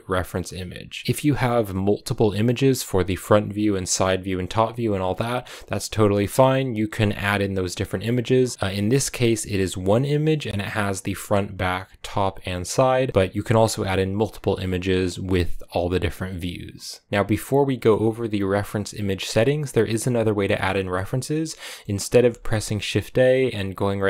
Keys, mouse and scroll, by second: 0.0-1.0 drag, 1.0-2.0 scroll up 3, 4.3-6.2 scroll down 1, 17.1-20.4 middle drag, 20.4 scroll down 1, 20.6-24.0 middle drag.